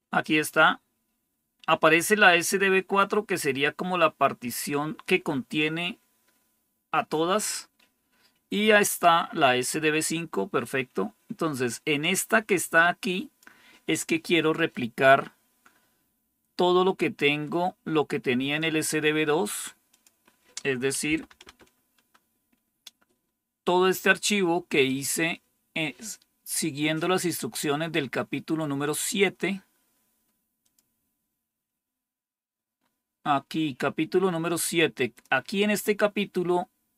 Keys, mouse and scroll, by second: 2.9-5.0 drag, 11.9-13.4 drag, 18.5-19.5 drag, 19.8 click, 20.7-21.7 typing, 24.0-27.3 drag, 30.5-31.6 drag, 32.3-34.1 scroll down 1, 34.1-35.0 scroll down 1, 35.0 click.